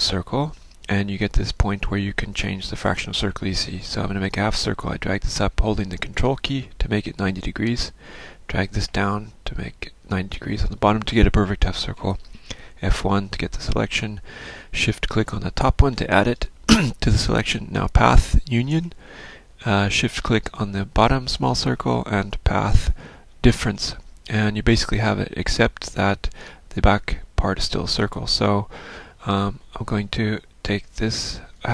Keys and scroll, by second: 13.0 F1, 30.9 ctrl+z.